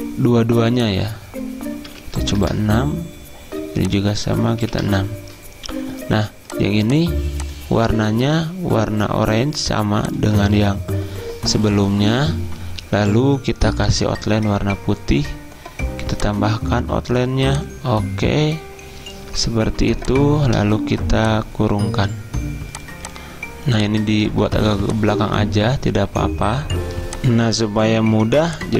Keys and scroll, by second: 2.0-2.5 typing, 4.7 6, 27.0 z.